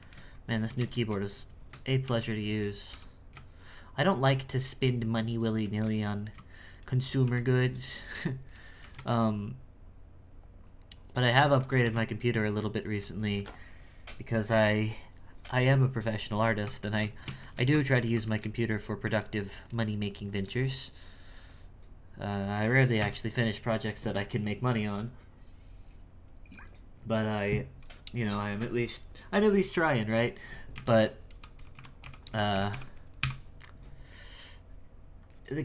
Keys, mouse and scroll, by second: 0.0 shift+middle click, 0.3-0.9 scroll up 1, 0.9-2.0 shift+middle drag, 2.0 ctrl+r, 2.5 right click, 2.9 g, 5.6-6.7 shift+middle drag, 6.7 shift+right click, 7.0-8.4 scroll up 3, 8.4 right click, 8.8 g, 11.3 shift+middle click, 11.8 g, 16.0-16.8 scroll down 7, 16.8 shift+middle click, 17.0-17.4 scroll down 1, 17.4 shift+middle click, 17.7 Tab, 18.2 shift+middle click, 19.0 z, 19.6 right click, 20.4-22.9 middle drag, 22.9 KP_1, 30.7-33.2 typing.